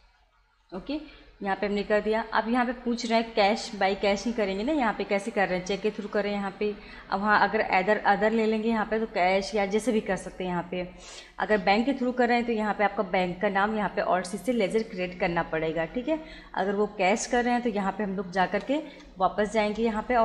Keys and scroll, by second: 0.6 Return, 18.5 BackSpace.